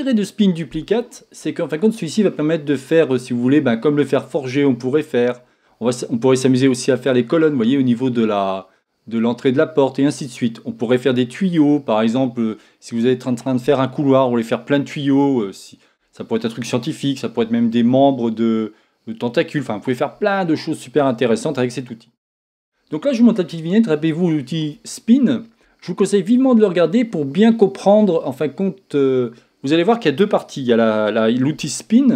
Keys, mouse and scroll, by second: 5.1-7.8 scroll down 1, 10.7 scroll down 1.